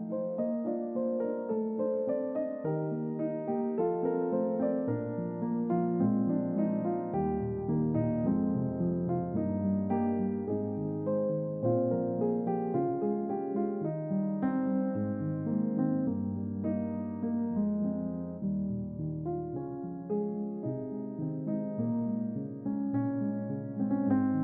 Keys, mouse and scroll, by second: 1.0-4.3 drag, 4.8 click, 5.3 middle click, 5.9 scroll down 2, 6.5-7.0 middle drag, 7.3-7.8 ctrl+middle drag, 8.3-9.0 scroll down 4, 8.8 shift+middle click, 9.7-10.0 scroll down 2, 10.2-11.7 middle drag, 12.1-12.6 ctrl+middle drag, 12.9-13.4 ctrl+shift+middle drag, 13.9-14.7 ctrl+shift+middle drag, 15.1-18.0 ctrl+middle drag, 18.3-18.8 shift+middle drag, 19.0 shift+middle click, 19.5 click.